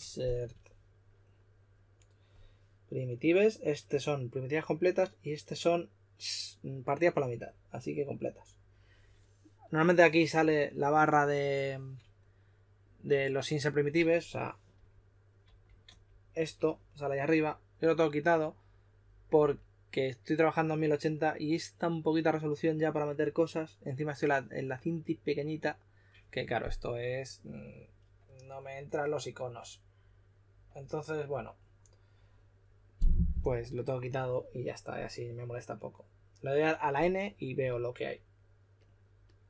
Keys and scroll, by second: 0.1-0.8 typing, 14.7-15.8 typing.